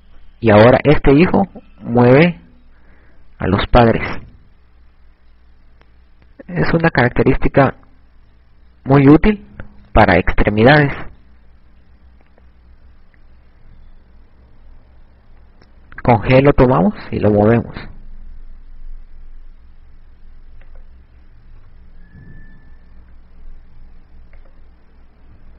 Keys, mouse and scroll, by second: 13.8 KP_7, 16.2 g, 21.3 click, 22.8 KP_1, 24.2 g.